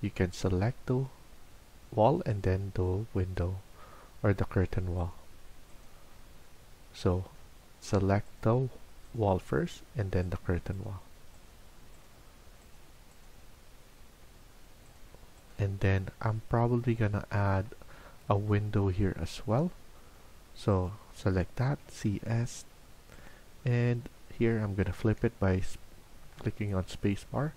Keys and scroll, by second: 17.8 Escape, 18.1 Escape, 21.5-22.4 typing, 26.1 Escape.